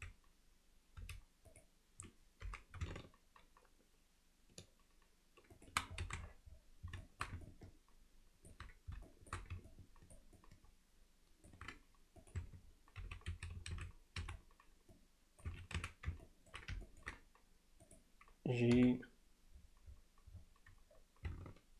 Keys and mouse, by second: 1.0 z, 1.5 click, 2.5 g, 6.1 alt+a, 7.0 alt+shift+middle drag, 7.5-8.5 ctrl+alt+middle drag, 9.1 alt+shift+middle click, 9.7-10.2 ctrl+alt+middle drag, 10.4-11.5 ctrl+alt+middle drag, 12.2 click, 12.4 Tab, 13.0 z, 13.3 a, 14.2 c, 15.8 z, 16.3 ctrl+alt+middle click, 16.9 ctrl+alt+middle click, 17.9 click.